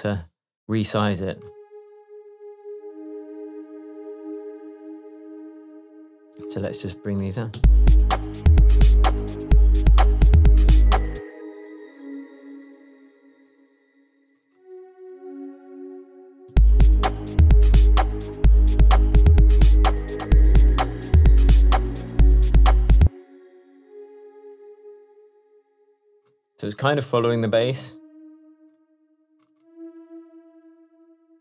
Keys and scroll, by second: 11.4 space, 16.6 space, 23.0 space.